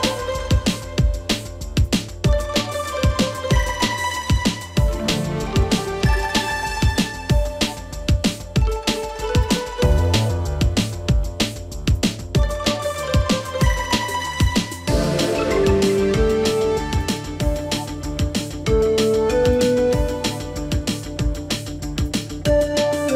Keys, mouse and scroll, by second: 9.1 click, 9.1 click, 9.4 right click, 10.6 click, 15.8 click, 16.3 scroll up 1, 17.5-23.1 drag.